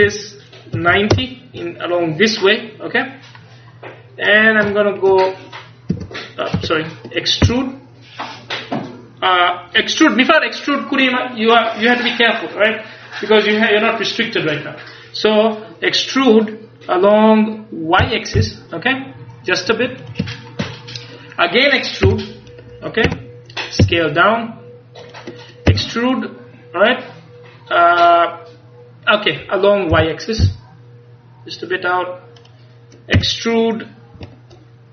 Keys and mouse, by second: 0.0 r, 6.0 Tab, 6.6 Tab, 7.5 e, 20.4-22.1 middle drag, 22.1 e, 23.9 s, 25.2-27.0 drag, 26.5 e, 32.5 click, 33.2 e.